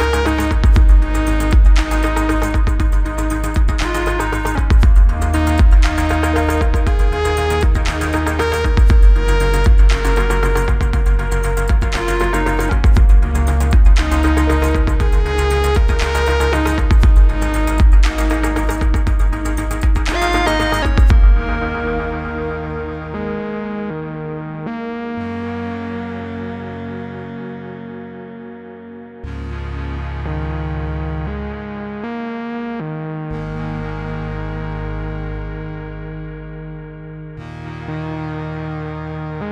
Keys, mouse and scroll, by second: 3.1 click, 4.5 u, 5.7-7.4 drag, 9.6-10.3 click, 14.0-14.7 click, 16.7 F9, 21.4-22.8 click, 24.9-26.0 scroll up 1, 26.4 click, 27.4 right click, 29.3 click, 30.4 click, 30.8 Return, 31.4-33.1 typing, 35.0-35.6 click, 35.7-37.0 typing, 37.5-39.0 click.